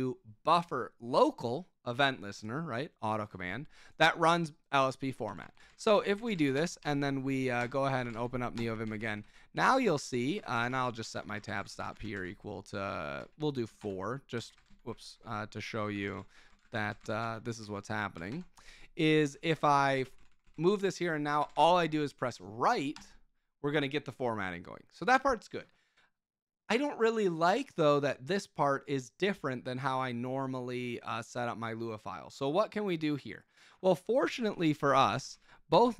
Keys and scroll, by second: 5.2 Escape, 5.4 Escape, 5.4-22.0 typing, 7.6 Return, 8.5 Return, 8.8 Escape, 14.3 Escape, 22.9 Return, 34.1-35.8 typing.